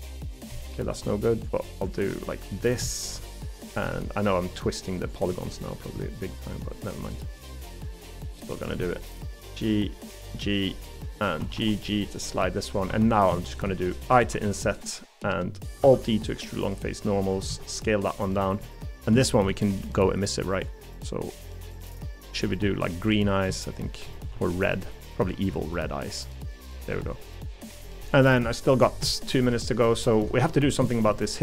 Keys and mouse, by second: 0.5 middle click, 1.0 g, 1.9 g, 2.8 middle click, 4.0 middle click, 5.3 middle click, 6.0 middle click, 7.0 middle click, 8.0 g, 8.8 middle click, 9.3 g, 11.4 g, 12.5 middle click, 12.9 3, 13.6 middle click, 14.3 i, 15.8 alt+e, 17.5 s, 19.2 shift+middle click, 19.9 g, 21.6 g, 23.6 shift+middle click, 25.3 g, 29.4 middle click, 30.3 shift+middle click, 30.9 shift+middle click, 31.2 middle click.